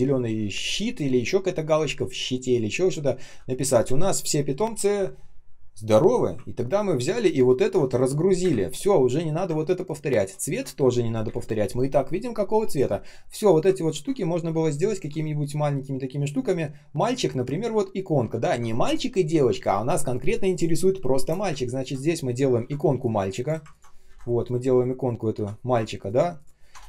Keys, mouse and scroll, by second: 6.9 ctrl+click, 7.4 ctrl+shift+click, 8.3 Delete, 9.4-9.9 ctrl+scroll up 1, 10.3 ctrl+shift+click, 10.9 Delete, 11.2 Delete, 13.6-14.7 ctrl+scroll up 1, 17.1 ctrl+scroll up 1, 18.2-19.3 ctrl+scroll up 1, 21.4 space, 24.0 Delete, 25.3-26.2 typing, 26.6 Return.